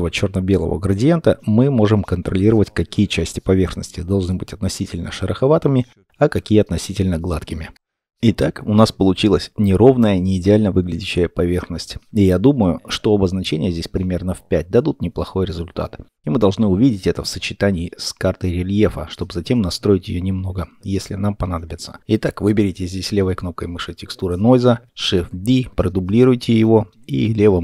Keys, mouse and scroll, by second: 3.2 scroll up 1, 3.9 middle click, 12.4-13.4 scroll, 14.3 5, 16.9-17.3 scroll, 17.3 middle click, 21.7-22.9 scroll down 1, 22.9 middle click.